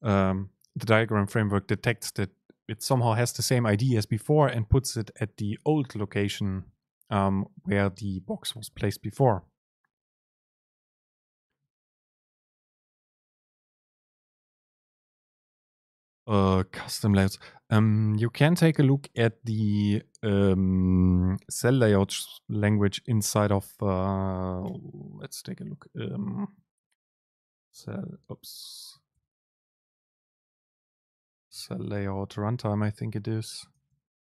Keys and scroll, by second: 24.8 super+n, 27.1 ctrl+alt+shift+super+o.